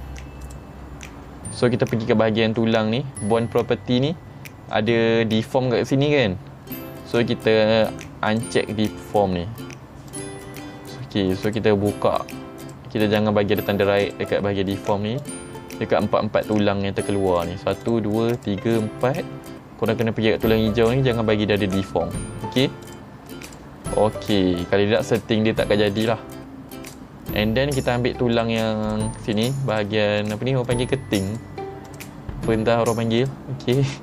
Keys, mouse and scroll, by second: 0.5 click, 8.4 click, 10.2 click, 11.5 click, 12.7 click, 14.1 click, 15.3 click, 16.5 click, 17.4 click, 17.9 click, 18.4 click, 18.8 click, 22.9 click, 23.5 click, 26.1 click, 26.9 click, 27.9 click, 28.4 click, 28.9 click, 29.3 click, 29.8 click, 30.3 click, 30.7 click, 31.4 click, 31.9 click, 32.6 middle click, 33.3 click.